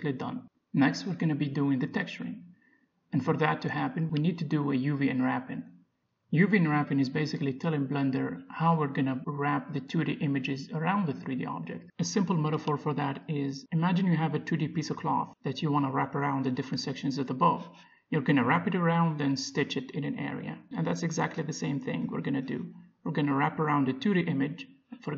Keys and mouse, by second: 3.7 Tab, 5.0-6.8 middle drag, 16.5-20.9 drag, 20.9-22.9 middle drag.